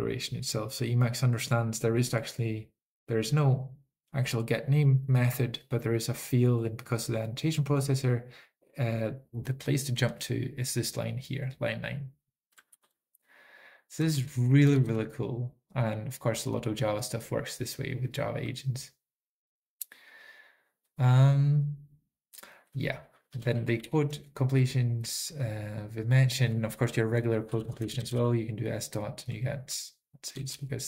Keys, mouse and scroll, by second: 3.4 typing, 7.3 typing, 12.8 alt+., 12.8 alt+,, 12.8 typing, 14.8 ctrl+a, 14.8 ctrl+s, 17.1 typing, 23.7 Down, 23.7 Up, 25.1 alt+f, 25.1 Left, 25.3 Left, 27.6 ctrl+p, 27.6 ctrl+e, 28.0-28.7 typing, 30.4-30.8 typing.